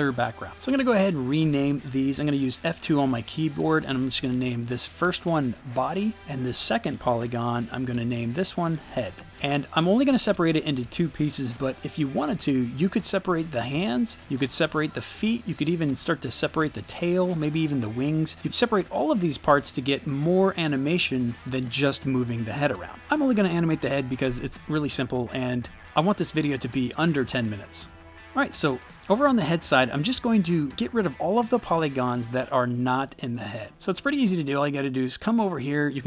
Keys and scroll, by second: 2.3 F2, 3.4-4.6 typing, 5.3 Return, 7.2 F2, 8.5-9.6 typing.